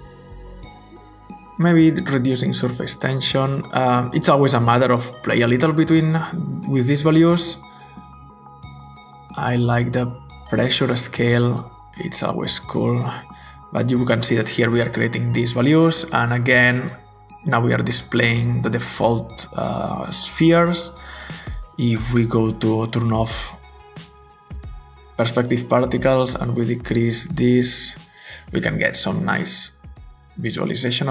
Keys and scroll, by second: 3.4-3.9 typing, 10.5-10.8 typing, 11.0 Return, 26.6-27.5 typing, 30.6 typing.